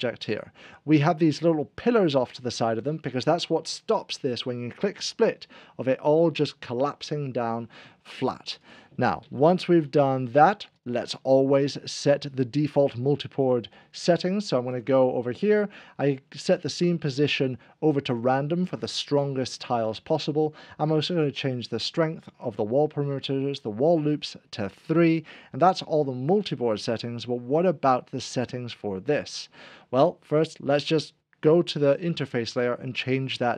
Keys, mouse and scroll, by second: 8.6 click, 9.2 ctrl+z, 10.8 click, 14.7 click, 21.3 click, 23.9 click, 30.4 click, 32.6 right click.